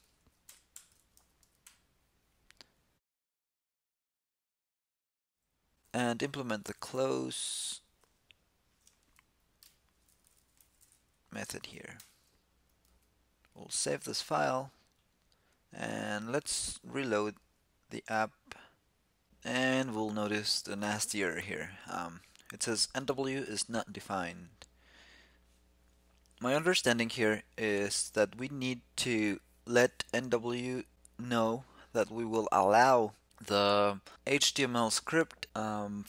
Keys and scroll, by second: 1.0 super+v, 11.7 shift+super+k, 12.6 super+s.